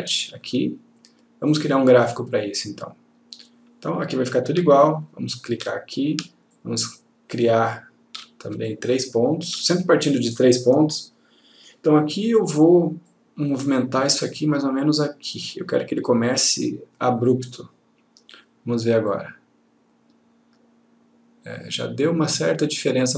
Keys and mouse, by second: 0.3 click, 4.9-5.9 ctrl+click, 6.7-8.5 ctrl+click, 8.8-9.7 ctrl+click, 13.2 click, 19.2 click.